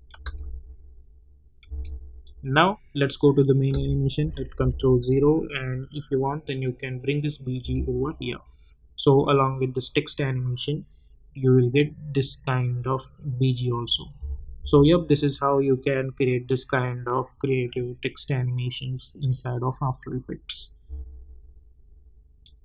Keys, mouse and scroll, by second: 0.2 space, 2.2 click, 6.0 click, 7.6 space, 14.1 space, 20.8 space, 22.4 click.